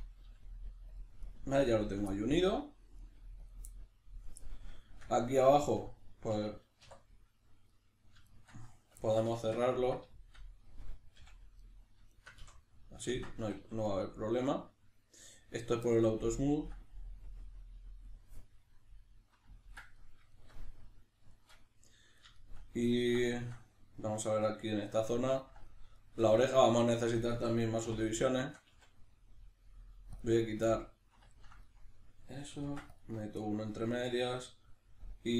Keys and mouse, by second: 1.0 click, 1.2 right click, 1.4 g, 1.8 click, 2.1 middle click, 3.0 right click, 3.2 g, 3.5 click, 3.7-7.7 middle drag, 6.8 2, 7.7 right click, 8.3 shift+right click, 9.0-11.6 ctrl+middle drag, 11.2 f, 11.6 right click, 12.1 shift+right click, 12.4 f, 12.7-16.4 ctrl+middle drag, 13.4 a, 16.4-18.7 drag, 18.7-28.1 middle drag, 27.9 3, 28.1 right click, 28.4 shift+right click, 28.7 x, 30.7-35.3 middle drag, 32.6 ctrl+r, 33.2 right click.